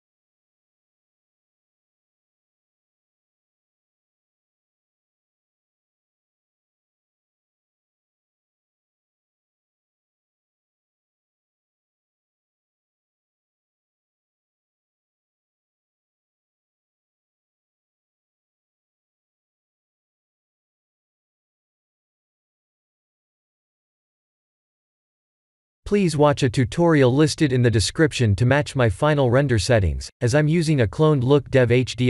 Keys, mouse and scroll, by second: 2.6 middle click, 3.7-4.6 scroll down 4, 4.6 scroll down 1, 4.6 KP_0, 6.4 click, 6.9 s, 12.1 click, 13.1 click, 15.0 click, 16.9 click, 17.3 ctrl+shift+t.